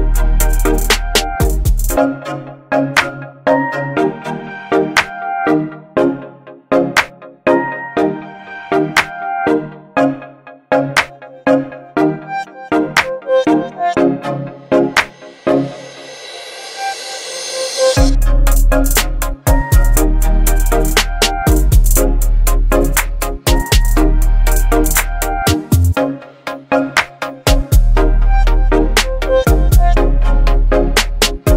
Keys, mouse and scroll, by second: 12.1 click, 12.2 right click, 13.1 click, 16.2 click, 17.1 click, 18.4 alt+scroll up 1, 19.1-19.8 click, 19.6 space, 20.1-20.7 drag, 22.8-25.6 typing, 22.9-23.5 click, 23.8-24.5 click, 24.7-26.6 click, 26.6 space, 27.9 v, 28.3 ctrl+0, 30.8 ctrl+t.